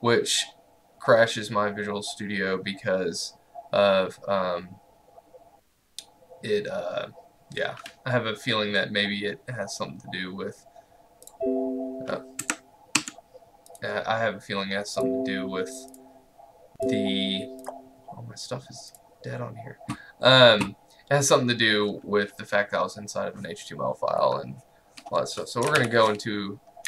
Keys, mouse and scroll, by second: 11.3 click, 12.5 Escape, 13.7 click, 25.8 ctrl+alt+l.